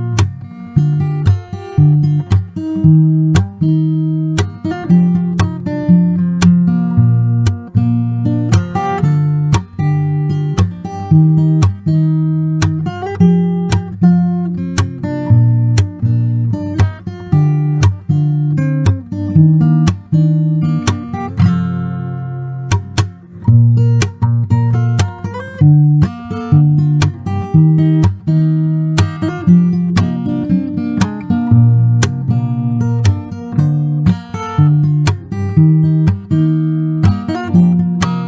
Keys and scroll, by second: 2.9 Escape, 4.8 Escape, 9.7 m, 9.8 space, 11.5-12.4 typing, 16.0 Escape, 19.8 Escape, 20.5 m, 21.6 Escape, 21.6 space, 23.0-26.9 typing, 28.6 Escape, 33.0 Escape, 35.9 m, 36.1 space.